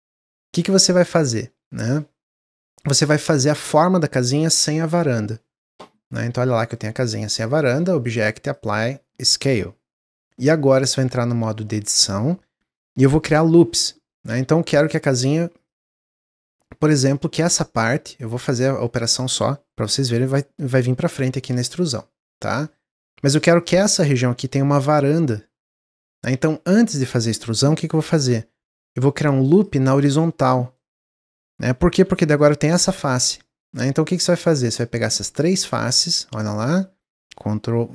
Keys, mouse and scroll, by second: 1.2-1.8 middle drag, 1.8 scroll up 1, 2.2-5.3 middle drag, 6.4-7.7 middle drag, 7.7-10.7 drag, 10.7 Tab, 13.2-14.6 ctrl+middle drag, 14.6 ctrl+r, 18.4 click, 18.9 click, 19.9 e, 23.3 middle click, 23.9 scroll down 1, 25.8 middle click, 26.2 ctrl+z, 26.6-28.0 middle drag, 28.0 scroll up 2, 28.2-28.6 scroll down 1, 28.9 ctrl+r, 30.7-31.9 middle drag, 31.9 3, 32.3 click, 33.7 shift+click, 34.0 shift+click, 34.5-37.6 middle drag.